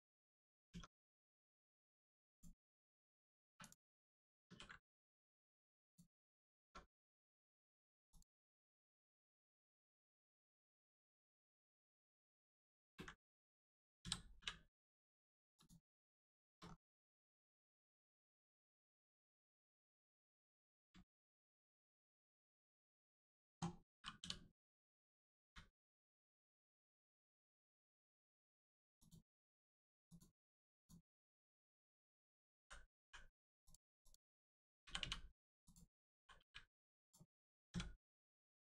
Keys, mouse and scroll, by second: 0.3 click, 0.7 Tab, 1.3 scroll down 1, 1.5 middle click, 2.0 Tab, 2.3 click, 2.6 middle click, 3.4 3, 3.6 click, 4.4 ctrl+e, 5.8 click, 5.9 click, 6.6 Tab, 6.9 middle click, 7.3 Tab, 7.5 middle click, 8.1 click, 8.4 middle click, 12.7 ctrl+space, 13.9 space, 14.3 u, 15.5 click, 16.3 shift+middle click, 16.6 scroll up 1, 16.9 click, 17.3 scroll up 1, 17.9 middle click, 18.2-18.6 scroll up 1, 20.1 middle click, 20.9 shift+middle click, 21.5 scroll down 1, 22.5-22.9 scroll up 1, 22.9 click, 24.1 l, 25.4 u, 26.9 click, 30.0 click, 32.9 u, 33.6 click, 34.8 l, 34.9 u, 35.6 click, 36.1 l, 36.3 u, 37.0 click.